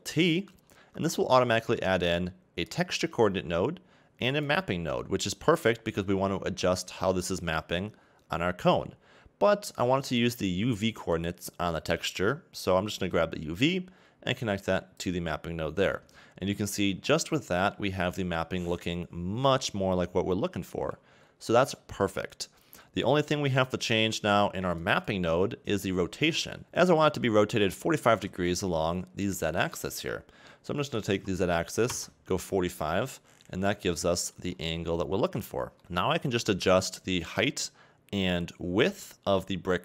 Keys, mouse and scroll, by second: 0.6 ctrl+t, 2.8 click, 15.1 click, 17.5 scroll down 2, 17.7 middle click, 20.8 KP_1, 21.3-23.8 scroll up 4, 27.5-28.9 scroll down 1, 31.9 click, 33.5-33.9 scroll up 1, 34.2-34.5 scroll down 2, 34.5 shift+middle click.